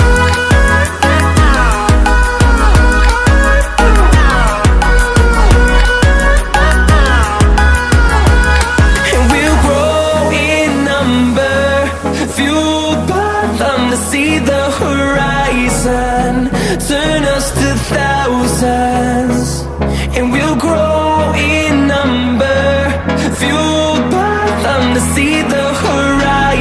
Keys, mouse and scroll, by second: 0.1-0.8 scroll up 4, 0.9-1.4 scroll down 4, 1.7-2.2 scroll up 4, 2.2 middle click, 2.4 middle click, 3.1-4.6 typing, 6.1 click, 7.0 KP_0, 7.3 KP_Decimal, 7.4 KP_2, 8.6 BackSpace, 9.3 5, 9.6 Return, 11.4-12.0 scroll down 3, 12.6 scroll up 2, 13.1-14.3 scroll up 6, 14.7-15.2 scroll down 4, 15.5-16.1 scroll up 4, 16.4-17.3 scroll down 6, 17.5-18.2 scroll up 4, 18.5-19.1 scroll down 3, 19.4-20.1 scroll up 2, 20.2-21.1 scroll down 3, 21.6-22.2 scroll up 4, 22.5-23.1 scroll down 3, 23.6-24.8 scroll up 3, 25.2 scroll down 1, 25.8-26.6 typing.